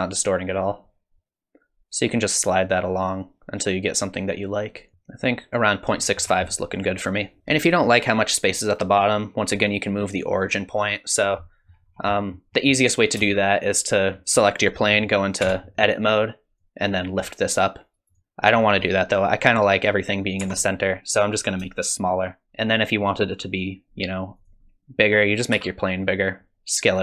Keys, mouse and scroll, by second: 6.2-6.8 scroll down 5, 6.5 middle click, 11.4 middle click, 11.9-12.5 scroll down 3, 12.1 middle click, 12.5 middle click, 13.2 space, 13.6 click, 15.4 Tab, 16.6 click, 20.4 Tab, 21.9 shift+click, 24.4 click, 25.5 s.